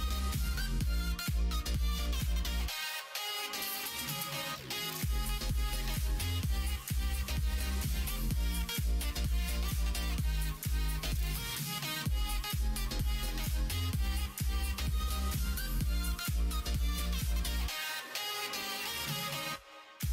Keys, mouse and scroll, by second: 0.3 r, 2.0 ctrl+z, 2.4 middle click, 3.4 middle click, 5.0-6.7 middle drag, 7.2 ctrl+r, 8.9 alt+click, 10.0 ctrl+f, 11.2 click, 11.5 middle click, 12.6 middle click, 13.4 middle click, 13.9 middle click, 14.4 middle click, 15.0 alt+click, 15.5 middle click, 16.3 shift+middle click, 17.8 middle click, 18.9 shift+click, 19.8 f, 20.0 middle click.